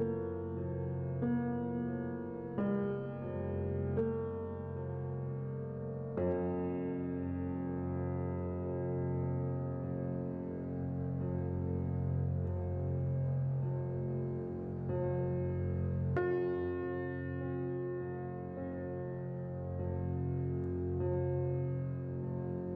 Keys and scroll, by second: 4.9 x, 7.3 a, 14.1 n.